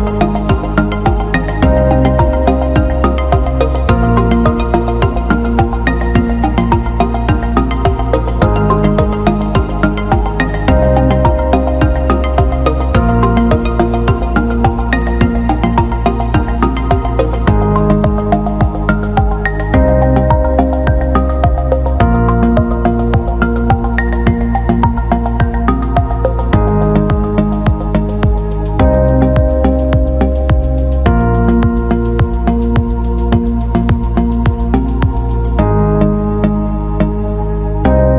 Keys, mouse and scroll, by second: 4.5 alt+middle click, 6.1 shift+d, 6.7 middle click, 7.7-8.9 drag, 9.0 alt+middle click, 9.7 alt+shift+middle click, 10.1 alt+middle click, 11.1 alt+middle click, 11.4 alt+shift+middle click, 11.7 middle click, 15.3 drag, 17.3-18.4 drag, 21.1-22.2 drag, 26.0 ctrl+z, 28.8-29.5 drag, 30.3 alt+middle click, 31.0 alt+middle click, 32.9 alt+middle click, 34.2 Tab, 38.0-38.1 right drag.